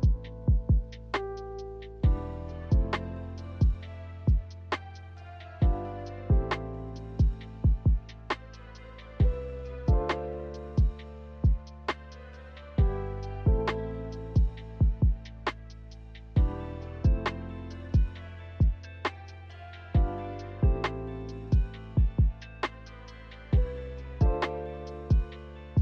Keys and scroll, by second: 5.7 ctrl+z, 11.0 a, 11.2 ctrl+z, 11.4 ctrl+z, 16.5 i.